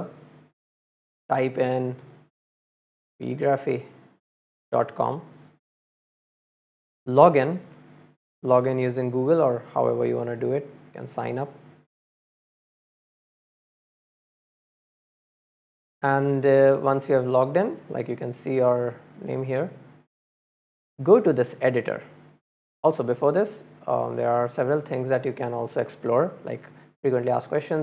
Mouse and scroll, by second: 1.6 click, 7.0 click, 8.9 click, 12.0 click, 15.1 middle click, 16.2 middle click, 20.5 middle click.